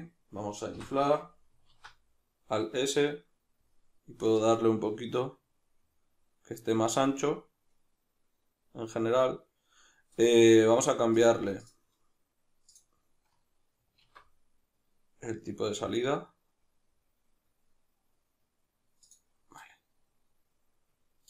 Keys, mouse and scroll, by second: 0.8 o, 1.7 alt+s, 10.2 right click, 11.2-19.1 drag, 14.0 alt+s, 19.5 middle click.